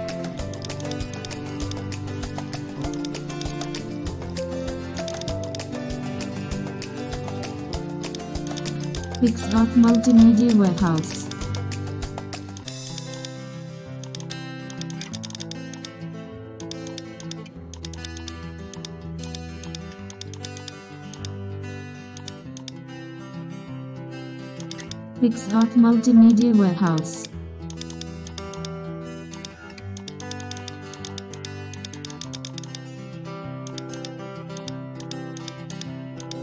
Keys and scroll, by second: 11.3 super+space.